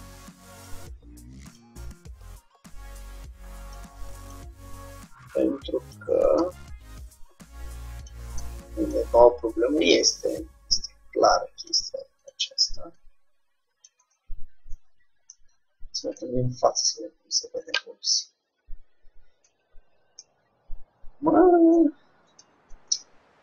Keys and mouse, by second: 1.6-4.1 drag, 4.3-6.7 drag, 6.5 Tab, 8.1-14.6 drag, 14.1 Tab, 17.0 x, 18.7 z, 19.6 Tab, 22.8 Tab.